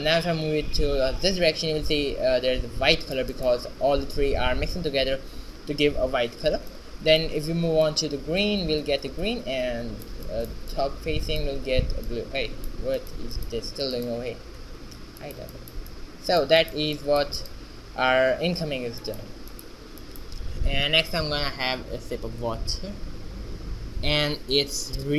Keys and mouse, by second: 2.3 shift+z, 5.4 middle click, 6.3 shift+z, 8.3 middle click, 12.5-14.3 right drag, 13.2 h, 16.0-18.2 right drag.